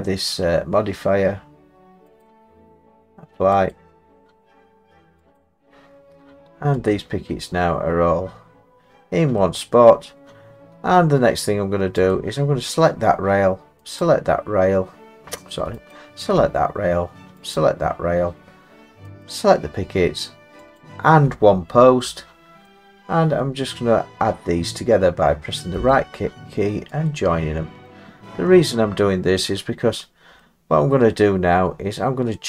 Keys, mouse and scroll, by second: 2.2 click, 5.4 click, 6.9 click, 9.4 middle click, 12.1 click, 13.4 click, 14.0 shift+click, 15.9 click, 17.6 shift+click, 21.7-22.1 scroll down 3, 22.6 scroll up 2, 22.7-24.1 scroll down 1, 25.9 right click, 27.1 click, 27.8 middle click, 28.5-28.9 middle click, 28.8 middle click, 29.1 middle click, 29.9 middle click, 30.4 middle click, 30.7 middle click, 30.9 middle click, 30.9-32.4 scroll.